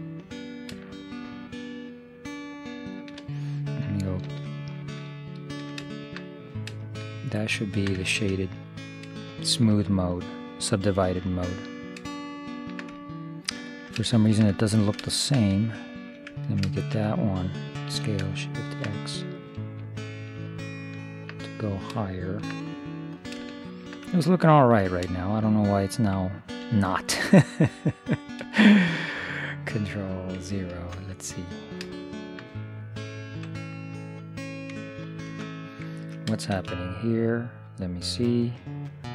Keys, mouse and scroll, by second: 4.3 ctrl+3, 5.3-7.3 middle drag, 7.7-17.9 middle drag, 15.9 right click, 16.2-17.9 drag, 18.0 s, 21.5 middle click, 26.5 right click, 27.0 click, 27.0-30.5 middle drag, 27.3-28.3 drag, 30.9 ctrl+0, 32.1 middle click, 35.3 ctrl+0, 35.9-37.2 middle drag, 36.6 shift+space.